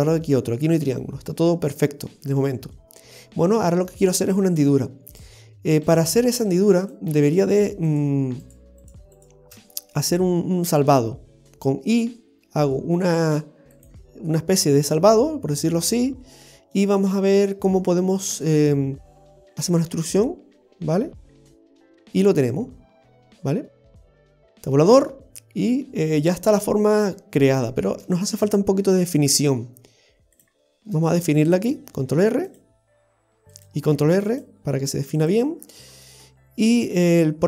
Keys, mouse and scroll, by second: 2.2 middle click, 5.9 click, 5.9 right click, 6.4 shift+right click, 8.2 shift+right click, 8.9 shift+right click, 9.6 shift+right click, 12.0 i, 15.2 middle click, 18.3 middle click, 20.9 e, 21.9 middle click, 24.2 Tab, 25.1 middle click, 27.4 scroll up 2, 27.5 shift+middle click, 28.1 shift+scroll up 1, 28.5 Tab, 29.2 scroll up 1, 30.4 click, 30.9 middle click, 32.1 ctrl+r, 34.2 ctrl+r, 35.6-36.3 scroll down 4, 36.3 middle click.